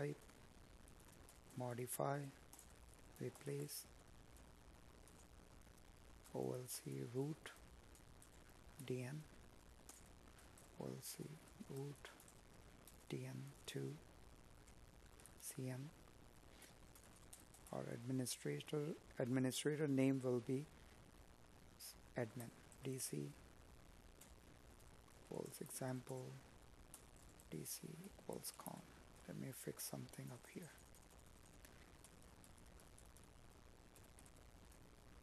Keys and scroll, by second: 3.3 Tab, 7.0 space, 22.1 Escape, 23.5 Up, 29.3 space, 34.9 space.